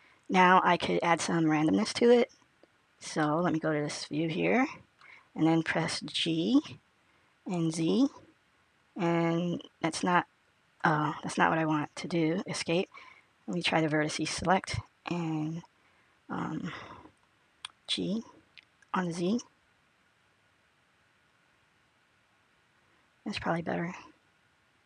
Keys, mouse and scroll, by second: 3.2 middle click, 7.6 g, 13.4 click, 17.7 g.